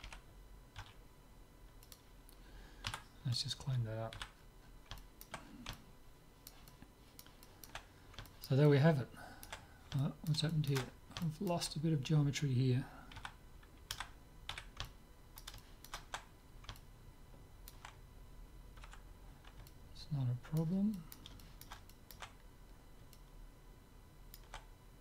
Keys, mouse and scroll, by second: 0.1 g, 2.9 Tab, 3.2 middle click, 4.2 z, 5.2-13.1 middle drag, 13.2 a, 14.1 a, 14.7 z, 14.9-18.6 middle drag, 19.1 Tab, 19.7-24.9 middle drag.